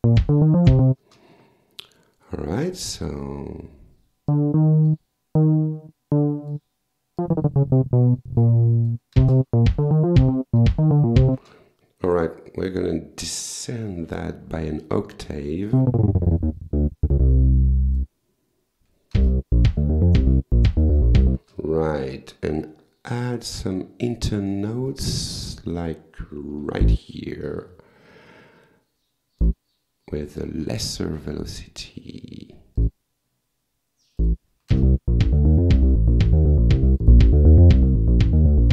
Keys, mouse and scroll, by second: 1.0 space, 2.8 click, 3.2 click, 4.3 click, 5.4-6.7 drag, 7.2-9.1 drag, 9.2 space, 11.4 space, 12.3-12.8 scroll down 2, 13.0 scroll up 2, 13.8 ctrl+a, 15.8-18.2 drag, 19.2 space, 21.4 space, 21.7 scroll down 1, 24.9 click, 26.6 w, 26.8 click, 29.4-30.7 drag, 32.8 click, 34.2 click, 34.7 space, 37.0 click.